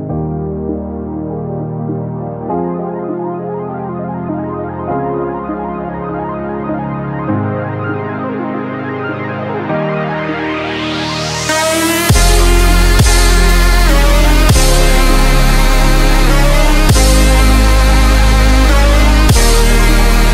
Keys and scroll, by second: 1.7 g, 6.0 v, 8.1 super+c, 8.5 super+f, 12.2 g, 16.7 v, 18.6 super+c, 19.0 super+f.